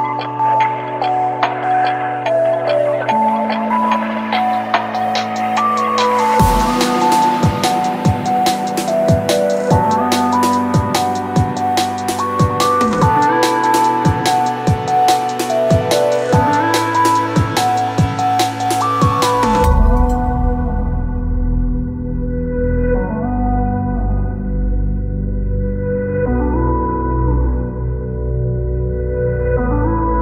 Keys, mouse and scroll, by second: 6.4 space, 24.6-30.2 typing, 28.7 Return.